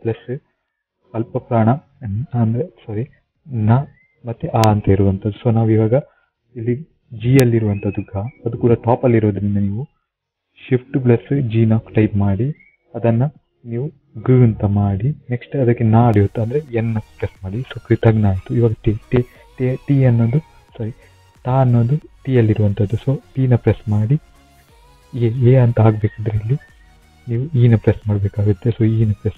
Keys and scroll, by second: 2.1 typing, 12.8 typing, 14.8 f, 17.4 n, 23.8 t, 26.3 typing.